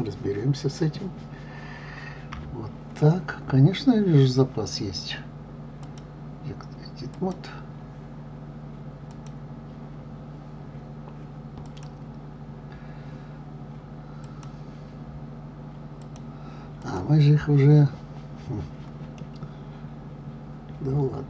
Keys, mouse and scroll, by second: 2.3 KP_3, 5.8-8.8 drag, 9.1 click, 11.6 click, 14.2 click, 16.0 click, 16.8 click, 19.2-21.2 middle drag.